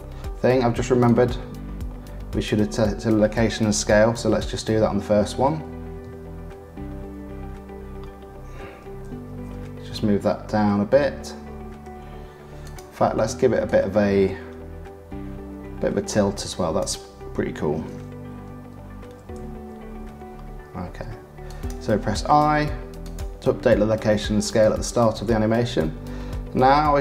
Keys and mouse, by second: 1.0-2.4 drag, 4.1 shift+`, 13.6-15.7 middle drag, 16.8 middle click, 17.7 shift+`, 22.3 i, 24.6-26.5 drag.